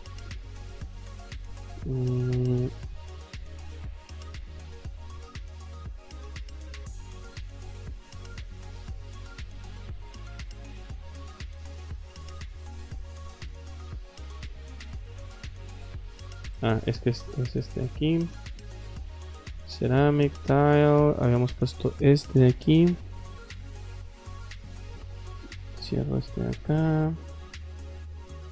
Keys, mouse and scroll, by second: 2.4 scroll down 2, 2.9 scroll up 2, 4.2-4.8 drag, 5.2 middle click, 6.1 click, 6.5 click, 7.3 click, 8.0 click, 9.2 click, 11.9-12.2 scroll up 2, 13.9 click, 14.6 click, 16.4 click, 17.0 click, 17.9 click, 18.7 click, 19.4 click, 20.0 click, 21.5 click, 22.9 click, 23.2 click, 24.5 click, 25.8 click, 26.8 click, 27.7 click.